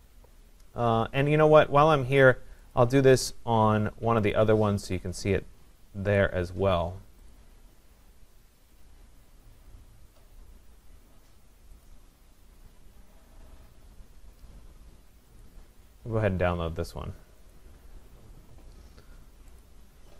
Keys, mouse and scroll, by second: 2.8 click, 4.3 click, 4.8 click, 6.2 click, 7.6 click, 9.3 click, 11.8 click, 15.4 click, 17.8 click, 19.6 click.